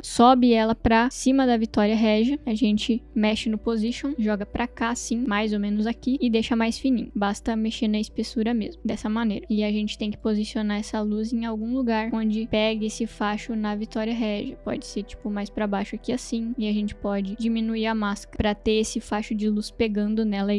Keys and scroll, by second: 0.0 ctrl+d, 3.7 v.